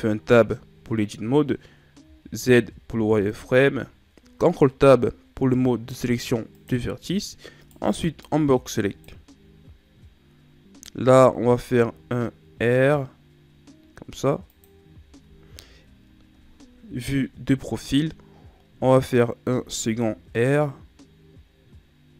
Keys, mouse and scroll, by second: 2.0 z, 3.0 ctrl+Tab, 7.5 right click, 7.8 b, 10.9 r, 14.9 z, 16.8 KP_3, 19.3 r.